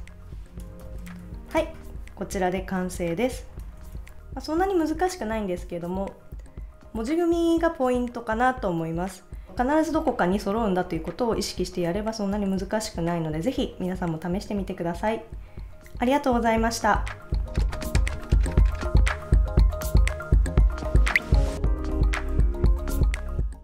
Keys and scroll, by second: 3.6 super+s.